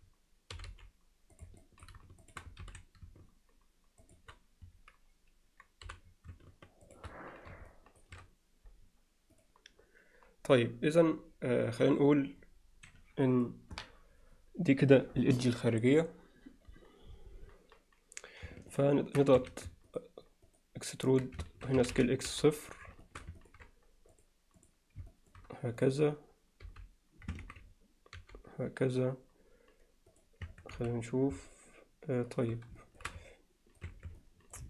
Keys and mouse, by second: 1.6 alt+middle click, 2.2 shift+click, 2.6 alt+s, 7.7 alt+shift+middle click, 19.1-19.7 ctrl+right drag, 21.8 s, 23.1 alt+shift+middle click, 23.4 ctrl+alt+middle click, 24.2-24.7 drag, 25.1 alt+shift+middle click, 25.8 click, 26.0 click, 26.7 h, 27.4 ctrl+z, 28.2 g, 30.1 click, 30.5 Tab, 30.8 z, 31.5-32.5 alt+middle drag, 32.8 alt+shift+middle click, 33.3-33.8 alt+middle drag, 33.9 Tab, 34.2 alt+middle click.